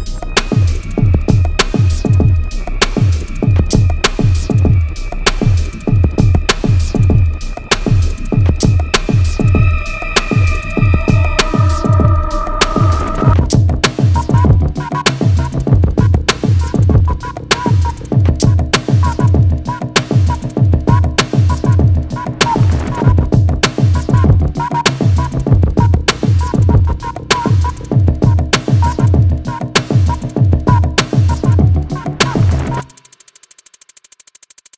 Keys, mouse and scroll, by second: 0.3 click, 0.8 alt+scroll up 1, 3.1-3.5 alt+scroll up 1, 3.5 click, 4.4 scroll down 2, 4.6 alt+scroll up 1, 5.0 click, 6.0 alt+scroll down 1, 6.7 alt+scroll up 1, 7.4 alt+scroll down 1, 8.8 click, 10.9 click, 14.3-19.8 drag, 22.1-24.5 drag, 24.5-26.0 drag, 26.0-27.7 drag, 27.7-31.5 drag.